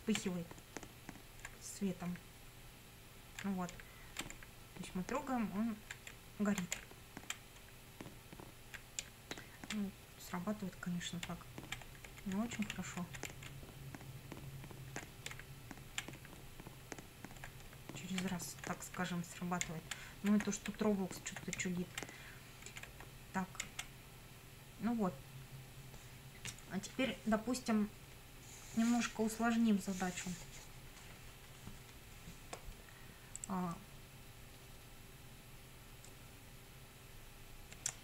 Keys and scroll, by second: 0.4 Up, 3.8 Down, 4.4 Up, 6.8 Down, 7.7 Up, 9.0 Down, 11.2 Down, 12.1 Left, 12.3 Up, 12.7 Right, 13.0 Up, 13.3 Left, 13.5 Up, 15.1 Left, 15.3 Down, 16.3 Up, 17.7 Down, 18.3 Up, 18.7 Left, 19.6 Down, 20.1 Left, 20.3 Up, 21.6 Down, 22.7 Left, 22.9 Up, 23.6 Down, 37.9 F9.